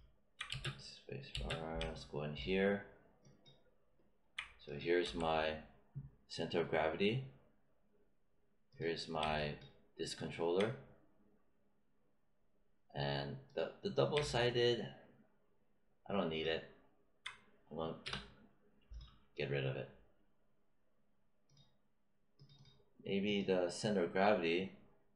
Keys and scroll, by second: 0.4 space, 5.0 w, 18.0 BackSpace.